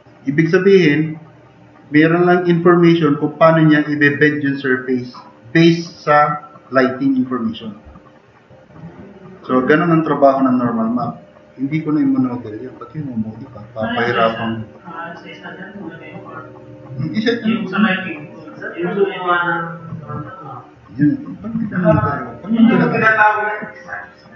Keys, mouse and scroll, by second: 10.4-10.9 middle drag, 14.7 middle click.